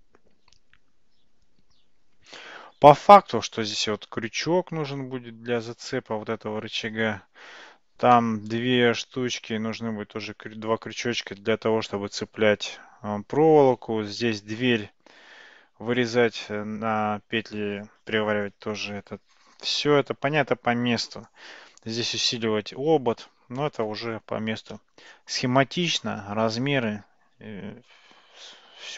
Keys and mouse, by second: 8.2-8.6 middle drag, 14.2-14.6 middle drag, 24.8-28.9 middle drag.